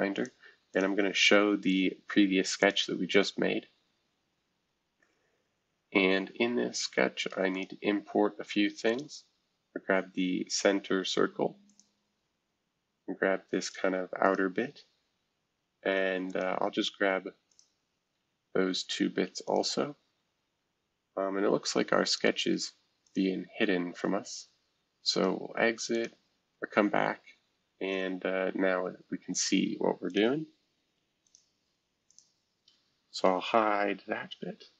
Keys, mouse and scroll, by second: 0.1 click, 0.7 click, 1.0 space, 2.0-2.6 scroll down 1, 2.6 click, 3.1-4.5 scroll up 1, 4.5-4.9 scroll up 1, 4.9-5.9 scroll down 1, 5.9-6.9 scroll down 1, 7.5-10.5 drag, 11.6-13.3 drag, 14.2 click, 16.3 click, 17.5 click, 18.1 Escape, 19.4-24.6 drag, 19.6 space, 25.1 right click, 25.9-27.2 drag, 27.2-29.9 scroll up 1, 29.9 scroll up 1, 30.1 click, 30.7-31.2 scroll down 2, 31.2 click, 32.1 click, 32.4-32.9 scroll down 2, 32.9-34.4 scroll up 2.